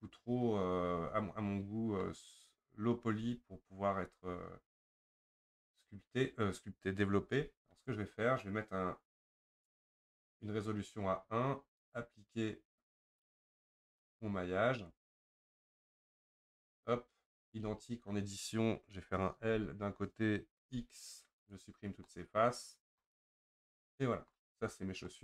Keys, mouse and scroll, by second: 7.5 Tab, 9.6-17.4 drag, 17.4 Tab, 19.5 l, 21.5 x, 22.1-24.7 middle drag, 24.7-25.1 scroll up 2, 25.1-25.2 middle drag.